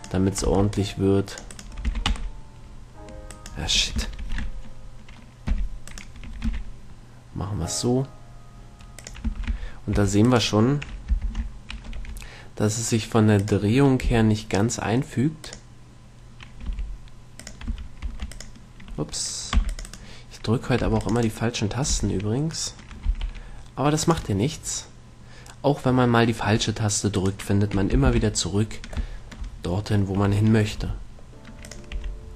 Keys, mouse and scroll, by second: 0.7 c, 2.1 e, 4.6 ctrl+z, 5.7 g, 6.7 e, 9.4-10.5 drag, 9.5 a, 9.7 a, 10.3 a, 11.5 ctrl+l, 12.2 r, 14.3 g, 15.8-17.6 drag, 16.9 g, 17.8-19.6 drag, 17.9 a, 18.4 v, 19.9 c, 20.2 right click, 21.1 c, 22.0-23.4 right drag, 22.2 g, 23.5-24.5 drag, 23.5-24.5 middle drag, 23.5-24.5 right drag, 24.3 g, 27.4-28.7 right drag, 28.4 ctrl+l, 31.0 g, 32.1-32.3 drag, 32.2 r.